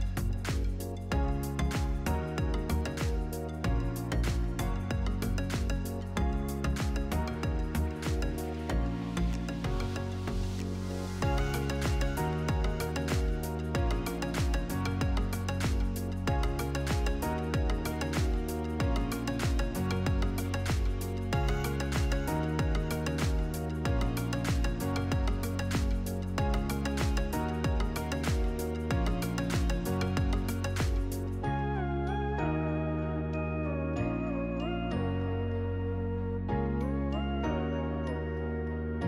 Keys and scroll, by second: 1.8-3.3 typing, 7.1 ctrl+v, 10.2 1, 11.1 Return, 13.2 Left, 16.2-18.6 typing, 21.0 n, 21.6 i, 21.9 o, 22.1 Return, 28.0 1, 28.3 Return, 30.6 1, 30.8 Tab, 31.0 1, 31.3 Return, 36.0 Left.